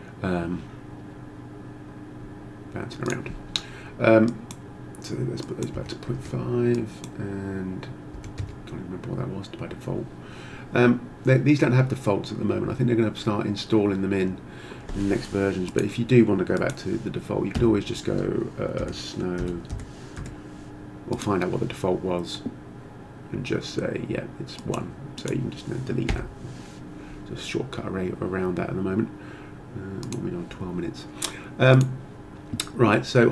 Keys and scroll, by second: 5.7 ., 6.1 5, 8.1 1, 8.4 Return, 17.6 Tab, 18.8-20.6 typing, 26.1 Delete.